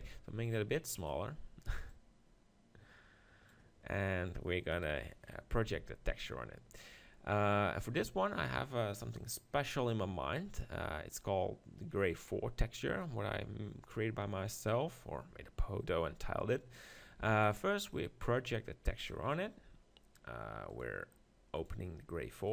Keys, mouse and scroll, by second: 1.0-3.8 drag, 4.9 KP_3, 5.7 Tab, 17.2 u, 19.2-22.5 drag.